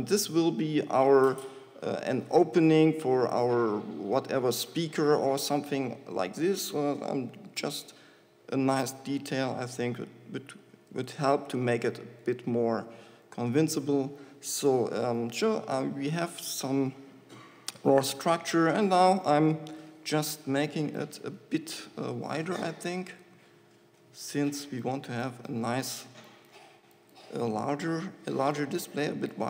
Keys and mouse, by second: 3.1-6.5 middle drag, 6.5 ctrl+r, 12.2-14.6 drag, 14.6 middle click, 18.2 ctrl+r, 21.2 middle click, 21.7 click, 21.9 middle click, 21.9 click, 22.1-23.1 middle drag, 23.4 middle click, 23.7-29.4 drag.